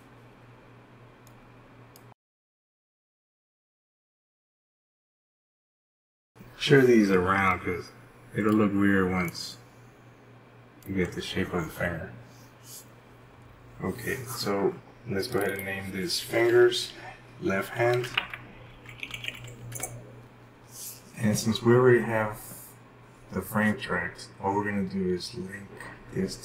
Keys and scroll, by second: 5.0 ctrl+z, 17.7-19.0 typing, 21.4 Return.